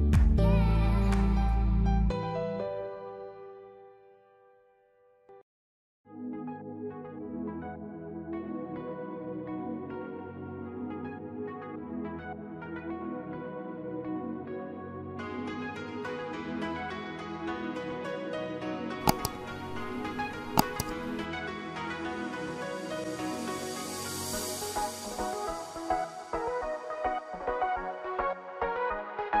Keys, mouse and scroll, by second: 2.9 scroll down 3, 3.0 middle click, 4.6 Tab, 4.7 middle click, 5.9 click, 6.1 middle click, 7.4 middle click, 8.1 shift+middle click, 8.4 middle click, 9.8 middle click, 10.3 click, 10.6 scroll down 1, 11.1 Tab, 11.4-11.8 scroll up 2, 11.6 Tab, 11.8 middle click, 12.7 click, 12.9 click, 13.3 shift+click, 13.4 shift+click, 13.7 click, 13.9 middle click, 14.3 ctrl+KP_Add, 14.7 scroll down 1, 14.8 middle click, 15.3 s, 16.3 middle click, 16.5 Tab, 16.6-17.0 scroll down 1, 17.6 scroll up 1, 17.8 Tab, 18.2 click, 18.5 shift+click, 18.7 shift+click, 19.2 x, 19.8 middle click, 20.6 shift+middle click, 20.9 middle click, 21.3 middle click, 22.9 click, 23.3 click, 23.5 middle click, 24.2 click, 24.8 KP_1, 25.5 click, 26.5 Tab, 26.6 middle click, 28.5 ctrl+s, 28.8 middle click, 29.2-29.4 scroll down 6.